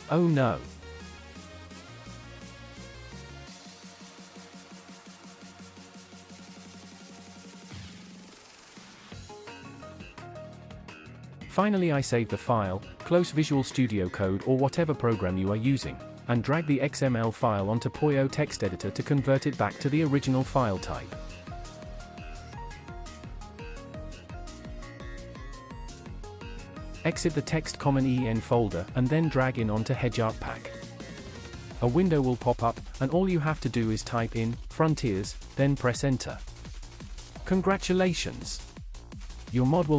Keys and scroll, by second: 3.9-7.9 typing, 12.4 ctrl+s, 25.5 Delete, 34.0-36.5 typing, 36.8 Return.